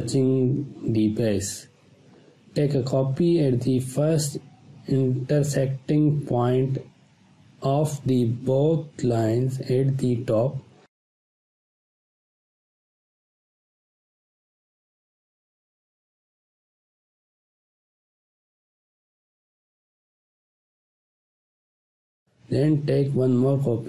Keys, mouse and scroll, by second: 0.8-4.6 alt+drag, 4.8-5.7 space, 5.9 space, 6.1-6.7 ctrl+click, 7.2 space, 7.4-8.0 ctrl+drag, 10.2 ctrl+space, 10.4 click, 11.1 click, 11.5 ctrl+click, 12.5-19.1 alt+drag, 19.4-19.8 scroll down 1, 19.8 space, 20.0-21.5 ctrl+drag, 21.8 scroll up 1, 22.1 ctrl+z, 23.4-23.8 alt+drag.